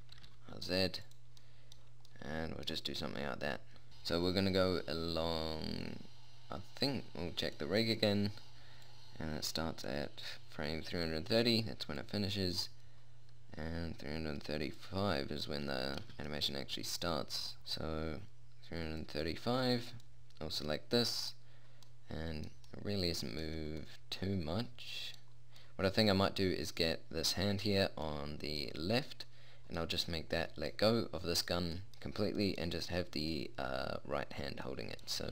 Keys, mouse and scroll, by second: 0.6 r, 3.2 middle click, 4.1-5.8 drag, 7.8-11.0 right drag, 9.2 click, 11.0 click, 12.4 click, 14.3-17.6 middle drag, 20.3-22.3 right drag, 22.4 middle click.